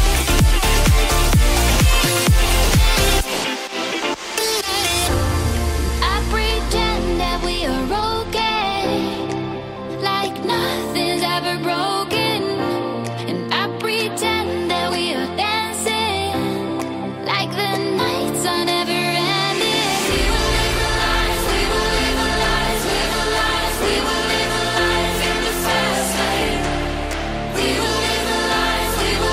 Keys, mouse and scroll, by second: 0.5 click, 1.1 click, 2.4 alt+shift+click, 2.9 middle click, 11.7-12.1 scroll down 2, 12.1 click, 23.2 click, 23.5 middle click, 24.3 scroll up 1, 24.3 middle click, 24.9 ctrl+z, 25.5 ctrl+z, 25.6 middle click, 26.1 ctrl+z, 26.3 ctrl+z, 26.6 ctrl+z, 26.9 ctrl+z, 27.3 middle click, 27.7 click, 27.9 middle click, 28.3 middle click, 28.8 middle click.